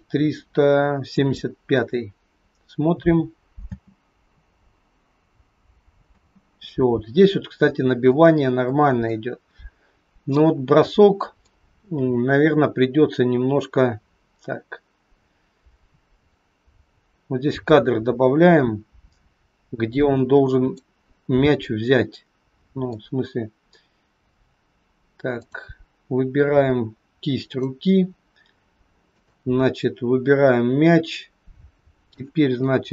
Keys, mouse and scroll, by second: 3.7 space, 6.0 space, 7.6-7.9 scroll down 1, 7.9 middle click, 11.5 click, 21.2-21.5 scroll up 2, 21.5 middle click, 25.3 click, 26.4-27.4 scroll up 2, 27.4 click, 29.2 shift+click, 30.2 scroll down 2, 30.8 middle click.